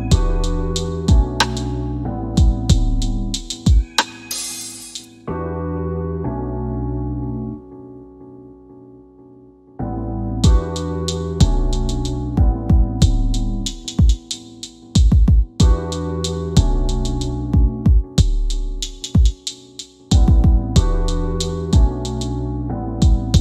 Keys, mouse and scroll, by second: 5.4 click, 12.4 click, 14.9 scroll down 1, 15.6 alt+middle click, 17.8 click, 18.4 typing, 20.6 typing, 22.6 click, 22.6 typing, 22.7 middle click.